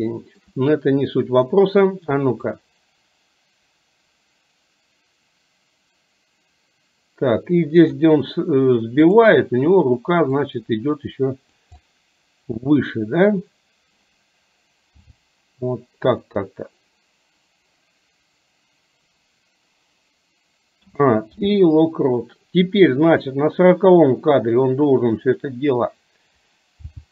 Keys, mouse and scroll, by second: 0.3 shift+middle drag, 2.6-8.2 drag, 9.1 click, 10.4-11.7 drag, 11.8-12.9 middle drag, 15.2 g, 20.9 a, 21.4 i, 23.2 click, 25.4 click, 26.9 g.